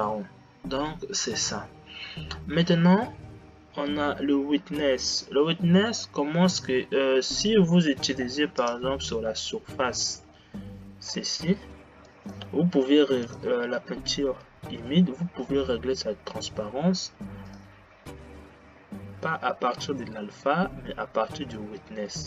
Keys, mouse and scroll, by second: 9.0 click, 17.8 click.